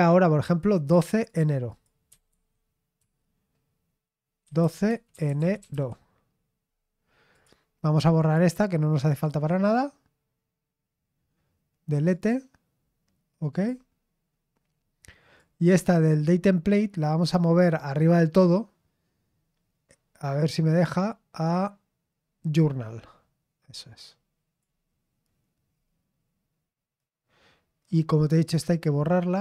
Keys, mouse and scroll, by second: 0.5 click, 1.1-2.2 drag, 1.9-3.0 typing, 4.2-6.2 typing, 7.3 click, 8.2 click, 9.1 click, 9.3-11.7 right drag, 11.9 click, 13.5 click, 15.4-24.9 drag, 25.7-26.2 scroll down 2, 28.2-29.4 right drag.